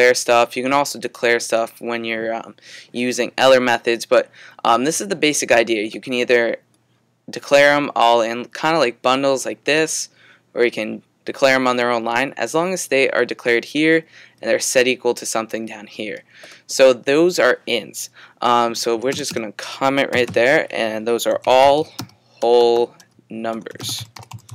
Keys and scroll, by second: 20.1-24.5 typing.